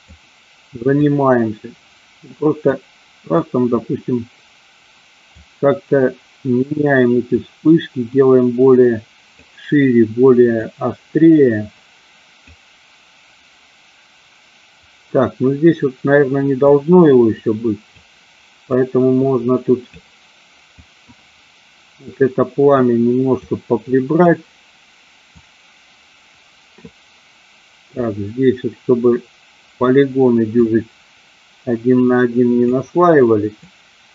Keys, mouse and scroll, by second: 1.1-2.8 drag, 3.5-5.5 drag, 7.5-9.5 drag, 10.6-12.6 drag, 16.7-18.2 drag, 18.9-20.1 drag, 21.0-23.0 drag, 23.6 click, 25.5-27.0 drag, 28.0-30.1 drag, 30.7-32.8 drag, 33.8-34.1 drag.